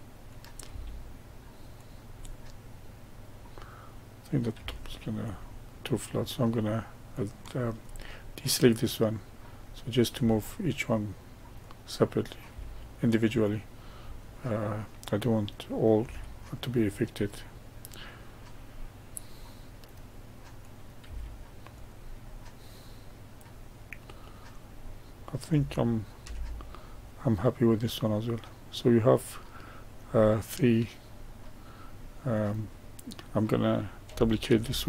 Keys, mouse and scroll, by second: 0.2 click, 0.6 g, 2.1-4.2 middle drag, 4.2 click, 4.5 g, 7.1 click, 9.6 click, 10.1 g, 12.1 click, 12.4 g, 14.2-15.9 middle drag, 15.9 g, 18.7-20.5 middle drag, 20.5 click, 21.0 g, 22.2-24.3 middle drag, 24.3 scroll down 1, 24.8-26.1 middle drag, 26.1 Tab, 26.7-29.8 middle drag, 30.1-32.3 middle drag, 32.3 click, 34.4 shift+d.